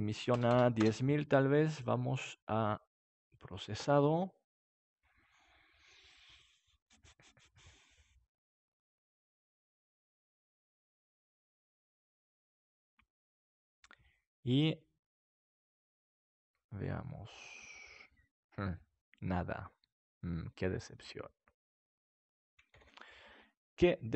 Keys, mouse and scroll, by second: 0.4 click, 0.4 KP_0, 1.8-7.5 drag, 22.7 ctrl+s.